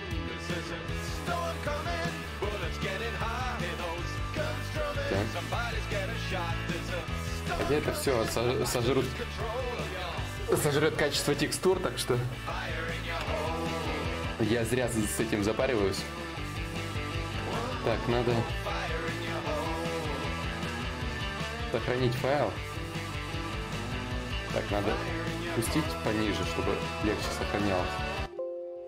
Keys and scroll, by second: 4.2 s, 6.4 s, 14.1 d, 21.7 Escape, 24.1 shift+d, 26.5 ctrl+s.